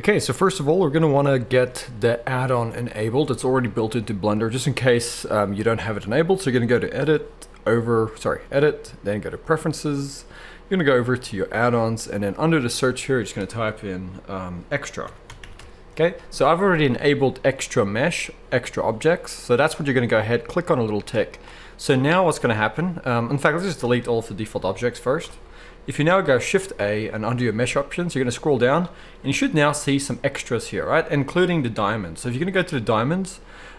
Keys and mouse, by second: 6.8-33.7 drag, 25.2 Delete, 26.5 shift+a.